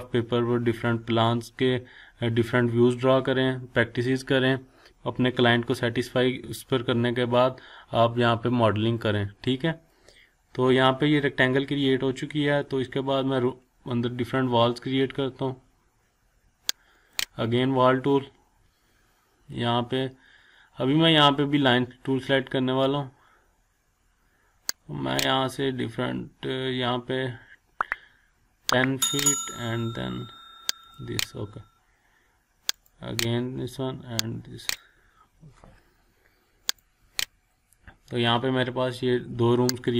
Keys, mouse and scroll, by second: 16.9 click, 27.2 click, 29.1 click, 38.7 scroll up 1, 39.8 click.